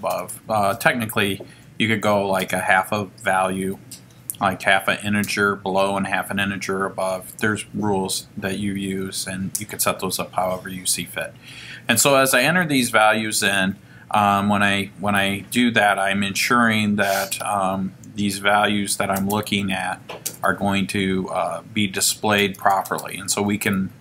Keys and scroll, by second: 0.4 5, 3.0 Down, 4.5 1, 5.2 0, 7.2 Left, 10.8 1, 11.4 0, 12.3 Return, 15.5 F5.